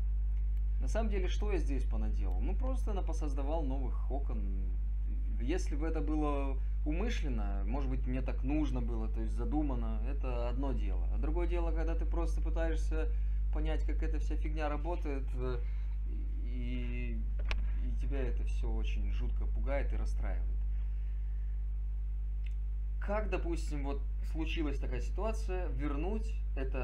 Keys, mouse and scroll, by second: 18.8 click.